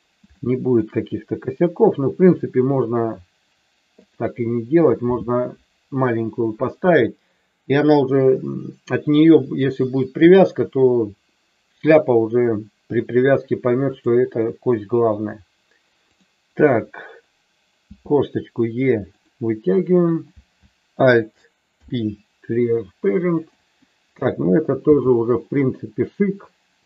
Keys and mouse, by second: 0.3 shift+middle click, 13.9 click, 17.8 e, 19.1 click, 21.7 alt+p, 24.8 g.